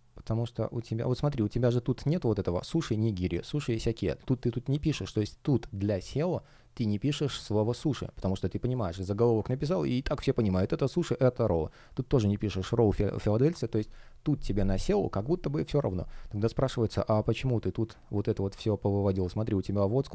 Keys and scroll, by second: 7.2 space, 16.4 space.